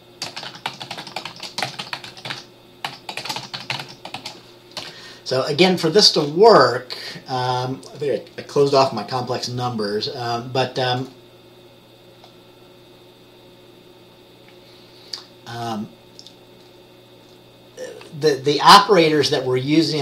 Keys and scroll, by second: 0.4-4.3 typing, 5.0 Return.